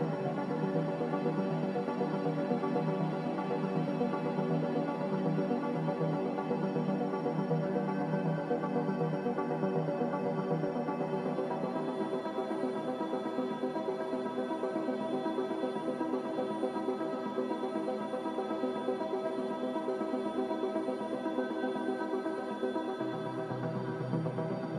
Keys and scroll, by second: 0.8 Escape, 3.1 5, 3.3 Return, 5.9 5, 15.3 5, 15.4 Return, 17.5 5.